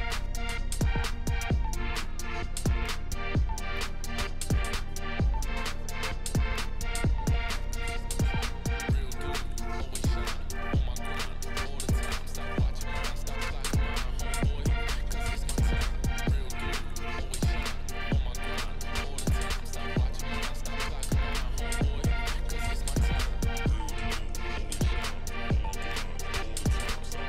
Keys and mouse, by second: 6.7 click, 12.1 click, 12.8 click, 13.6 click, 14.2 click, 23.4 click, 25.1 drag, 26.0 click, 26.4 shift+click.